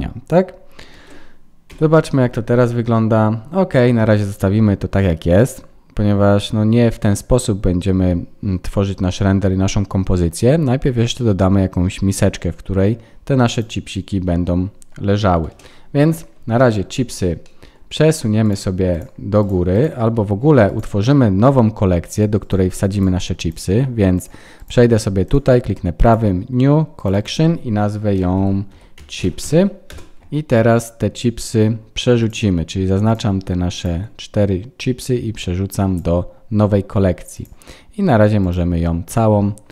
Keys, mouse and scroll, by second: 0.9 ctrl+s, 1.7 F12, 15.5 KP_0, 16.2-16.7 scroll down 5, 16.5 middle click, 17.0-18.8 scroll up 8, 17.4 middle click, 18.4 click, 18.9 shift+click, 19.9 shift+click, 20.6 click, 22.4 click, 23.5 click, 23.5 right click, 25.2 right click, 27.0 click, 30.2 click, 32.2 click, 33.7 click, 34.0 shift+click, 34.7 click, 37.3 click.